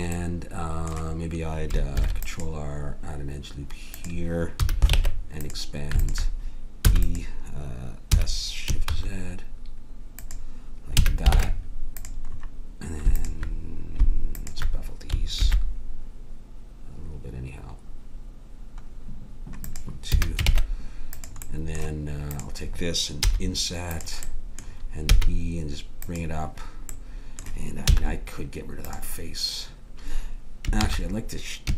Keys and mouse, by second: 2.0 ctrl+r, 4.5 a, 4.9 ctrl+Tab, 6.8 e, 8.0 s, 11.0 a, 11.2 ctrl+Tab, 15.4 ctrl+b, 20.0 a, 20.4 ctrl+Tab, 23.2 i, 25.1 e, 27.8 x, 30.8 ctrl+z.